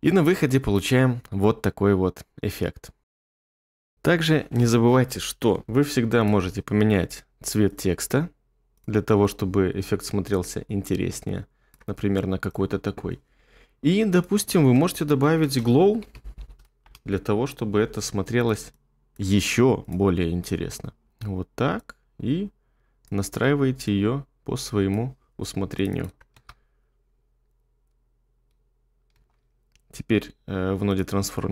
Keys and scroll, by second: 15.4-16.8 typing, 20.7 2, 26.4 space, 29.1 space.